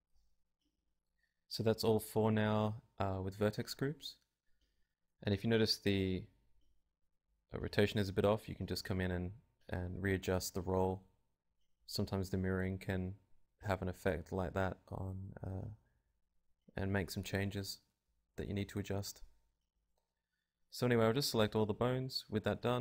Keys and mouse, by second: 0.7 ctrl+Tab, 1.1 r, 1.7 ,, 3.9-5.3 right drag, 4.5 click, 5.6-6.7 middle drag, 6.7 click, 7.4 Tab, 10.2 KP_7, 11.1-13.4 drag, 14.2 right click, 15.4 click, 15.4 Tab, 16.3 right click, 18.7 right click, 20.0 click, 20.9 a, 21.2 alt+r, 21.4 alt+g, 21.6 alt+s, 22.2 ctrl+Tab, 22.5 a.